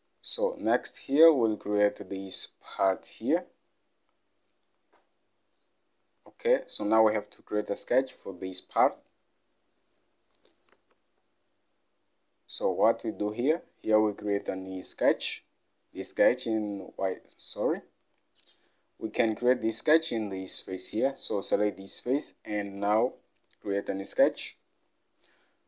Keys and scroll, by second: 10.8 alt+Tab.